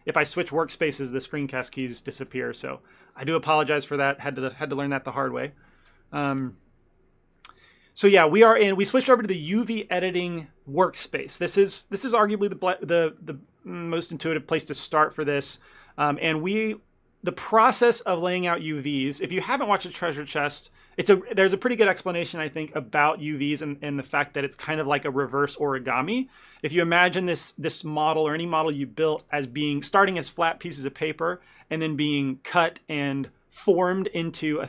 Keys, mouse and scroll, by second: 3.0 middle click, 3.4 shift+middle click, 3.9 ctrl+middle click, 4.3 middle click, 8.5 middle click, 12.7 middle click, 13.3 ctrl+middle click, 13.9 middle click, 14.3 shift+middle click, 27.9 middle click.